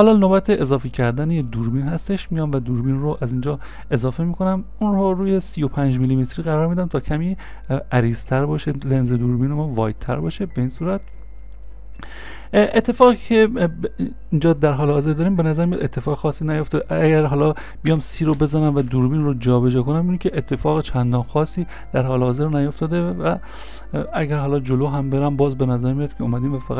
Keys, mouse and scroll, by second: 2.3 right click, 15.5 middle click, 22.4 c, 22.4 ctrl+z.